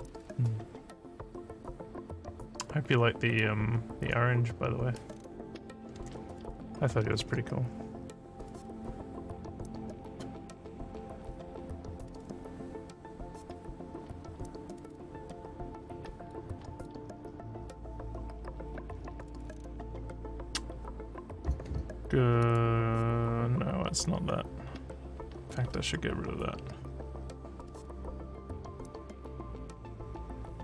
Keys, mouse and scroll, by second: 3.4-6.5 drag, 9.9 click, 16.2 click, 16.8 click, 19.2 scroll up 1, 19.4 scroll down 1, 22.4 click, 27.2 scroll down 1, 28.4 scroll down 1, 29.3 scroll down 1.